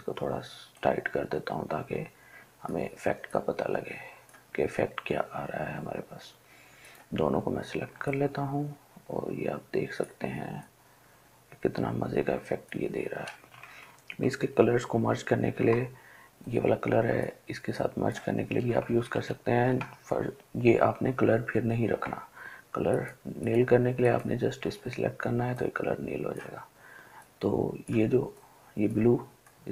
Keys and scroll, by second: 14.1 ctrl+alt+z, 14.5 ctrl+alt+z, 14.9 ctrl+alt+z.